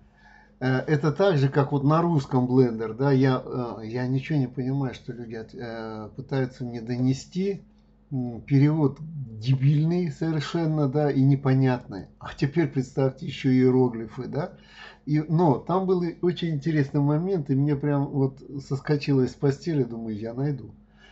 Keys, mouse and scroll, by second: 11.8 click.